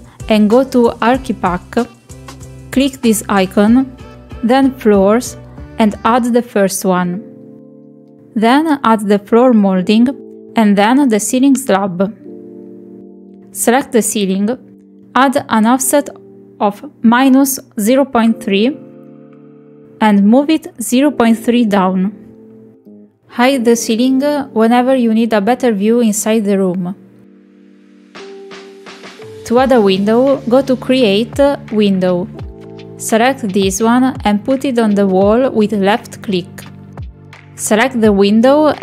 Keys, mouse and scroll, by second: 2.7 click, 4.4 click, 6.2 click, 8.4-8.8 shift+middle drag, 8.9-9.2 middle drag, 9.9 click, 11.5-12.7 middle drag, 14.0 click, 15.5 middle click, 15.9 click, 16.8-18.6 drag, 19.5 click, 20.4-22.6 drag, 23.0-24.1 middle drag, 26.5 KP_Decimal, 28.5 middle drag, 29.2 shift+middle drag, 29.6 middle click, 30.2-30.6 middle drag, 30.8 shift+middle click, 32.4-33.5 drag, 35.9 Escape.